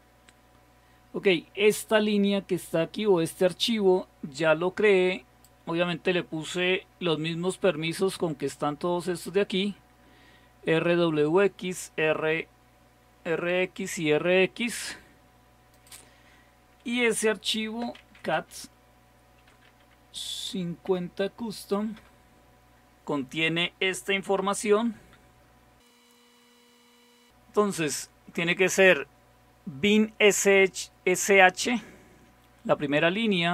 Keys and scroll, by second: 17.7-20.2 typing, 20.9 Tab, 22.0-23.3 typing, 25.0 ctrl++.